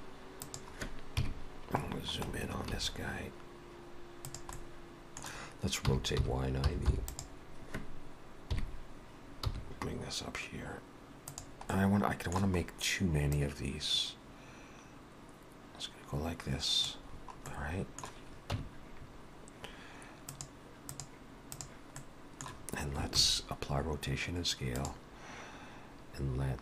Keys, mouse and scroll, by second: 1.1 KP_Decimal, 1.9-3.4 scroll down 10, 2.8 s, 4.6 middle click, 5.9 r, 8.6 KP_3, 9.5 g, 11.7 middle click, 12.7-13.0 scroll up 1, 13.3 click, 17.1-17.6 scroll down 4, 17.5 middle click, 18.6 Tab, 20.3 click, 22.0 middle click, 23.2 ctrl+a.